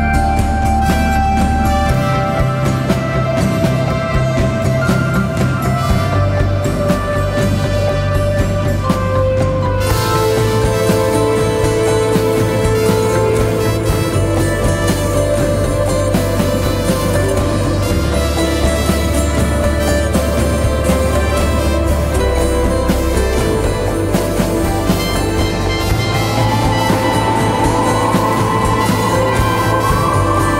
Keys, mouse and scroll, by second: 19.5-20.7 typing, 20.8 double click, 22.4 typing, 22.5 double click.